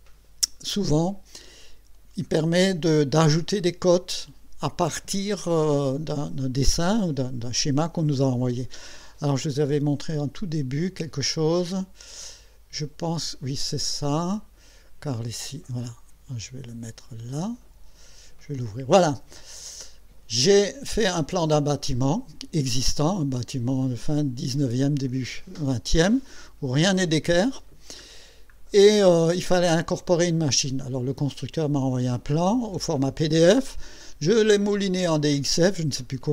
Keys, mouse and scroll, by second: 10.2 click, 12.2 click, 15.4-18.2 drag, 19.4-19.8 scroll up 2, 20.0 scroll down 2, 22.7-23.9 middle drag, 27.9 scroll up 2, 29.1-30.4 middle drag, 30.8 scroll up 2, 32.1-32.4 scroll up 2.